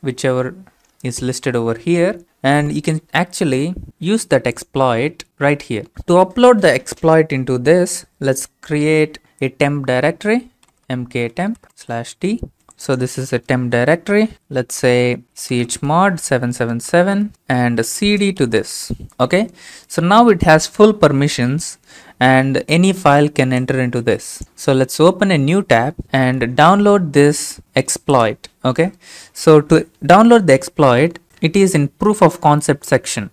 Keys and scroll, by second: 10.3-12.5 typing, 12.5 Return, 13.8 ctrl+c, 14.3-18.3 typing, 17.1 ctrl+v, 17.3 Return, 18.4 ctrl+v, 18.6 Return.